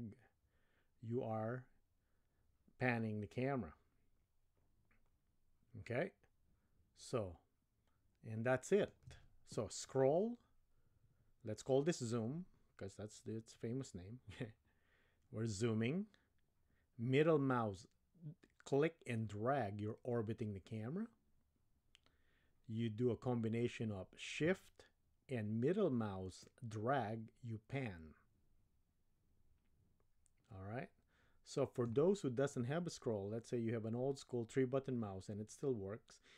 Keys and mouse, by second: 18.9-23.4 middle drag, 26.5-31.9 shift+middle drag.